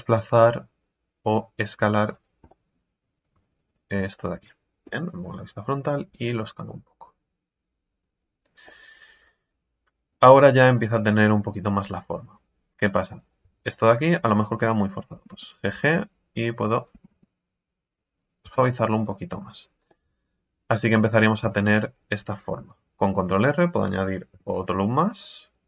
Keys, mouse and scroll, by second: 1.1 click, 2.1 right click, 2.5 middle click, 3.1 right click, 4.1 scroll down 4, 4.8 KP_1, 5.5 scroll up 2, 6.1 s, 8.2 scroll down 3, 8.4 Tab, 8.7-10.2 middle drag, 10.2 Tab, 10.6 scroll up 5, 11.0-12.3 right drag, 12.3 click, 13.1 right click, 14.2 scroll up 2, 16.9 g, 18.2 scroll down 4, 18.4 Tab, 18.8 middle click, 19.4-19.9 scroll down 4, 19.9-21.4 middle drag, 21.4 Tab, 21.6 scroll up 5, 22.5 ctrl+r, 24.3 KP_3, 25.5-25.6 drag.